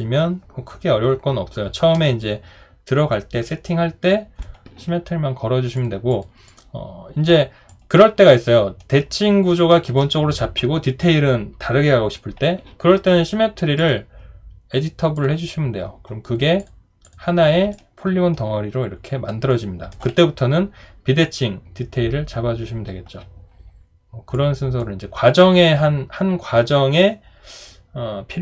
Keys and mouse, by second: 7.7 alt+click, 17.7 alt+click.